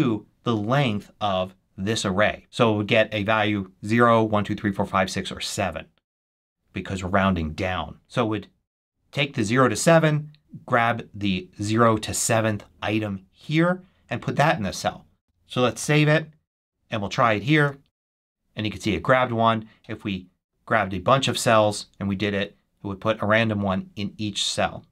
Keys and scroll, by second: 15.7 super+s, 17.4 shift+super+1, 22.0 shift+super+1.